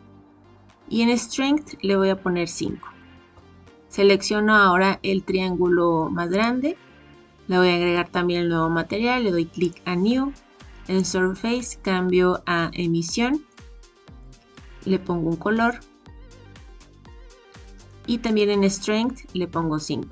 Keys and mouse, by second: 1.6-3.6 drag, 9.6 click, 11.0-13.6 drag, 14.1 click, 18.2-20.1 drag.